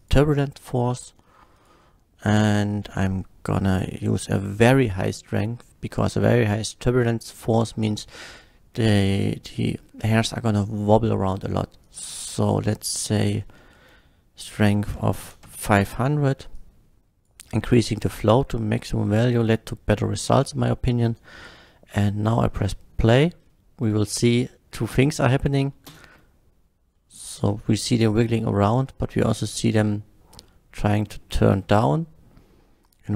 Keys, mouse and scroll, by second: 0.0 click, 1.5 click, 3.7 click, 11.9 click, 12.3 click, 14.9 KP_5, 15.4 Return, 15.4 KP_0, 16.5 click, 18.3-19.0 middle drag, 21.7-22.1 middle drag, 22.5 scroll up 1, 23.0 middle click, 24.0 middle click, 25.9 space, 26.9 space, 27.0-28.8 middle drag, 30.4-31.2 middle drag, 31.6 space, 32.3 space, 32.8 click.